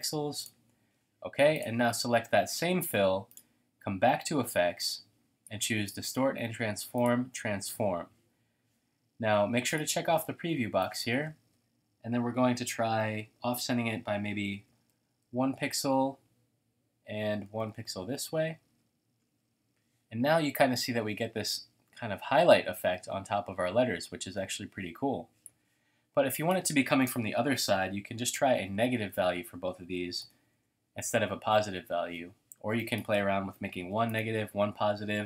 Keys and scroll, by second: 5.8 typing, 14.3-15.8 typing, 16.8-18.3 typing, 20.8 typing, 27.2-30.2 typing, 30.5 Tab, 33.4-34.1 typing, 34.3 Tab.